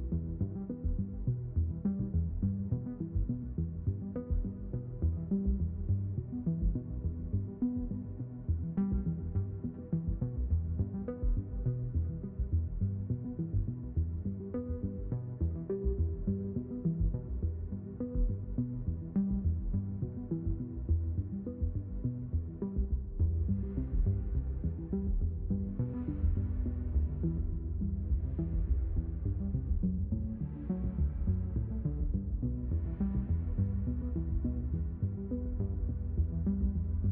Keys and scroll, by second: 2.8 ctrl+alt+x, 4.3 ctrl+alt+x, 10.9 ctrl+shift+x, 14.6 q, 14.8 2, 19.0 space, 20.5 space, 21.8 ctrl+alt+x, 23.8 ctrl+alt+x, 26.0 space, 26.6 ctrl+alt+x.